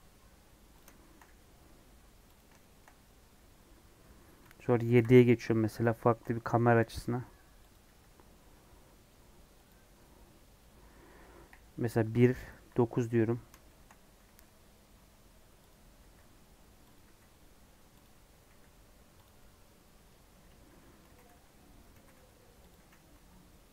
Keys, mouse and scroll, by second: 0.9 shift+middle click, 1.2 e, 2.5-4.9 shift+middle drag, 4.9 KP_7, 5.9 shift+middle click, 6.7 e, 7.8 e, 10.5 KP_3, 11.3 KP_1, 12.5 KP_9, 13.6 shift+middle click, 14.2 e, 15.9 e, 18.4 e, 19.4 scroll down 1, 19.5-21.0 middle drag, 21.0 g, 22.0 g, 22.7 e.